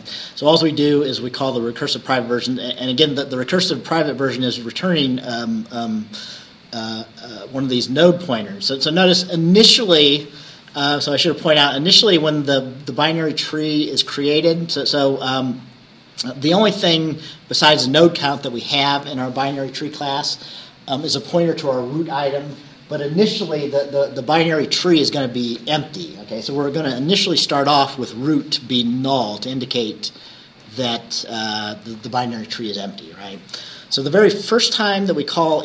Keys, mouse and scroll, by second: 7.5 scroll up 1, 10.2-11.1 scroll up 4, 12.2 scroll up 2, 14.5-15.5 scroll up 6, 15.7 scroll down 2, 28.2 scroll down 2, 28.9-29.3 scroll down 2, 29.8 scroll down 2, 30.3-30.7 scroll up 2, 34.0-35.6 scroll down 3.